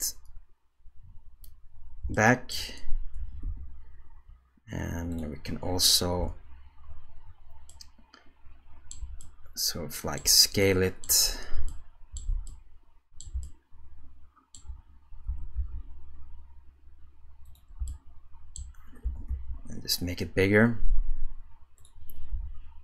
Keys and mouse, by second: 2.1-2.5 shift+drag, 3.2 g, 6.2 KP_0, 7.7-9.0 middle drag, 9.2-10.2 shift+middle drag, 10.6 middle click, 11.7-12.3 shift+middle drag, 12.5-13.2 ctrl+middle drag, 13.4-14.6 shift+middle drag, 15.3 s, 17.9 shift+middle click, 22.3 g.